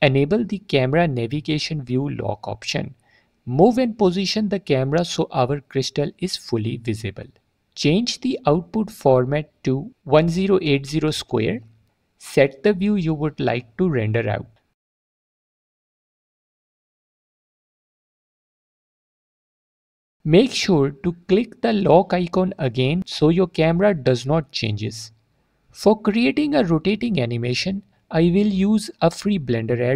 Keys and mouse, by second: 3.2 click, 3.9-4.6 middle drag, 5.1-5.5 ctrl+middle drag, 5.6-5.9 middle drag, 7.0 middle click, 9.0 click, 9.6-12.6 drag, 11.6 BackSpace, 13.9-14.7 ctrl+middle drag, 14.9-15.2 middle drag, 15.5 click, 19.2-19.6 middle drag, 19.7 alt+click, 23.8 click, 24.8 alt+click, 26.4 4, 27.0 4, 27.3 4, 29.0 click, 29.4-29.9 drag.